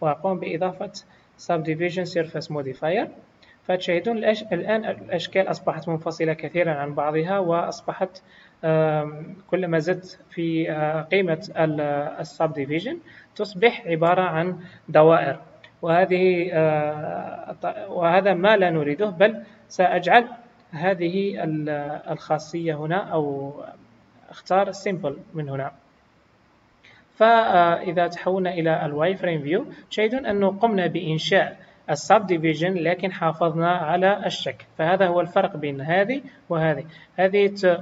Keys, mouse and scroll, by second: 0.1 click, 9.4 click, 9.7 click, 25.8 click, 29.1 click, 30.8-31.2 scroll up 2, 37.1 click.